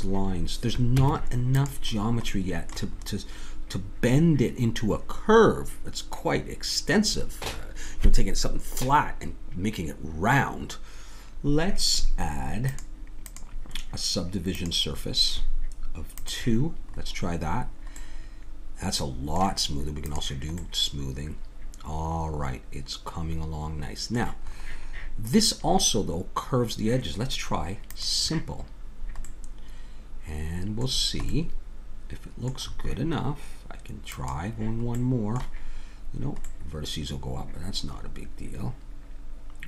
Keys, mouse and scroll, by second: 1.0 Tab, 2.2 middle click, 12.7-18.0 drag, 17.6-19.3 middle drag, 20.0-22.0 drag, 24.5-27.9 middle drag, 27.9-29.3 drag, 29.3 middle click, 30.4 middle click, 34.2 click, 35.1-36.5 middle drag, 36.7-38.5 middle drag.